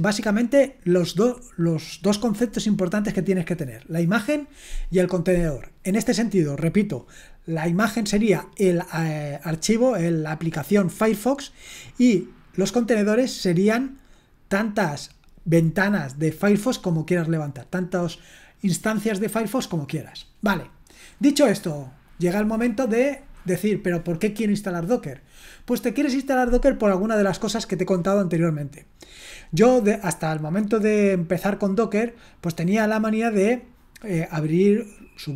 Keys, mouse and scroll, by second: 3.8-21.1 scroll down 1, 21.1-35.3 scroll down 1.